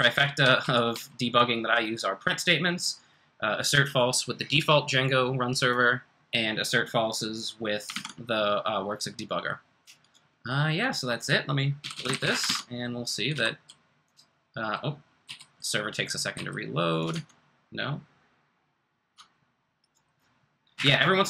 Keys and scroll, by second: 0.0-1.4 typing, 7.9 super+Tab, 10.8 super+Tab, 11.7-13.3 typing, 15.0-15.7 typing, 17.1 r, 20.7 Up.